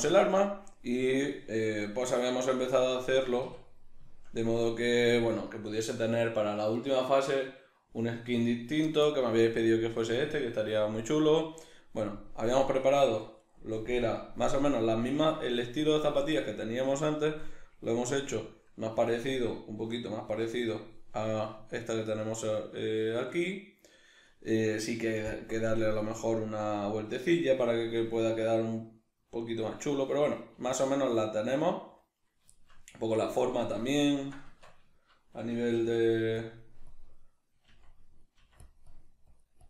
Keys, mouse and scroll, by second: 3.2 a, 13.3 right click, 13.9 KP_Decimal, 14.4-36.4 middle drag, 33.5 alt+q, 34.5 Tab, 35.8 f, 36.4 click, 37.7 click, 37.7 f, 38.4 f.